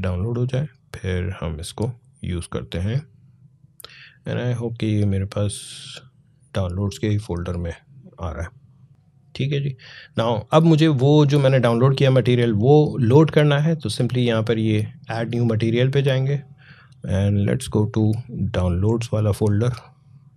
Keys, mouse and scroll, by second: 4.0 click, 8.9 click, 10.8-14.7 drag, 15.4 click, 19.4 click.